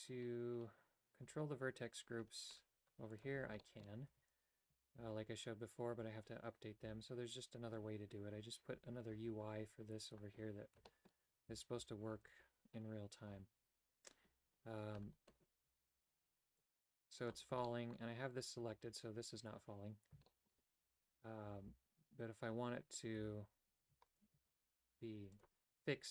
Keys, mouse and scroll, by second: 3.1 click, 3.6 shift+middle click, 4.1 a, 6.9 a, 10.8 a, 10.9 middle click, 11.5 a, 12.1 alt+right click, 16.6 click, 17.6-20.1 shift+middle drag, 20.3 shift+middle click, 23.2 a, 24.8 g.